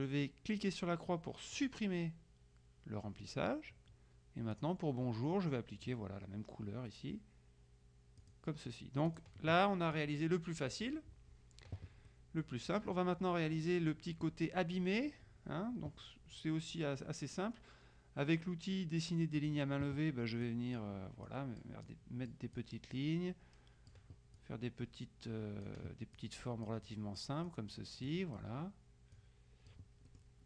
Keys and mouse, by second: 1.7 click, 4.7 click, 8.3 click, 9.2 click, 12.2 middle click, 19.5 click, 20.5 click, 21.3 middle click, 21.9 click, 22.2 middle click, 22.7 click, 26.2 click, 27.5 click, 28.1 click, 28.3 middle click, 29.2-30.4 drag.